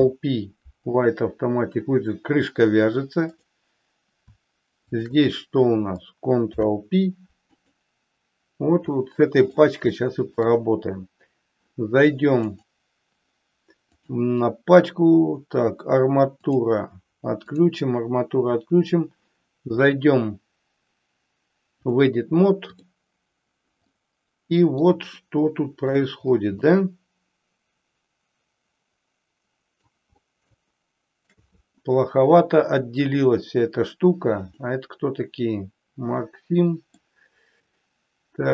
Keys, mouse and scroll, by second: 6.3 ctrl+p, 8.9-9.6 middle drag, 10.1 shift+middle click, 12.5 click, 16.6 click, 17.6 click, 21.9-22.9 drag, 23.9 middle click, 25.2 shift+middle click, 26.8-29.8 middle drag, 30.7 shift+middle click, 34.5-37.2 middle drag.